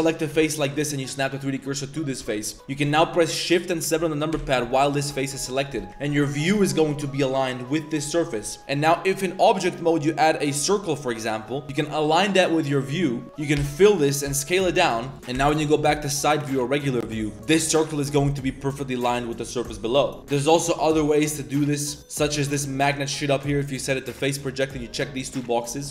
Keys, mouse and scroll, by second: 0.3 shift+s, 1.0 click, 1.4 click, 2.6 click, 5.2 shift+click, 8.6 Tab, 8.6 shift+a, 11.7-12.7 drag, 13.2 Tab, 13.2 1, 13.6 f, 14.3 s, 15.3 KP_1, 16.0-16.5 drag, 16.9-17.4 drag, 17.8 drag, 18.1 drag, 18.7-19.1 drag, 19.4 middle click, 21.7-22.2 drag, 22.4-25.8 middle drag.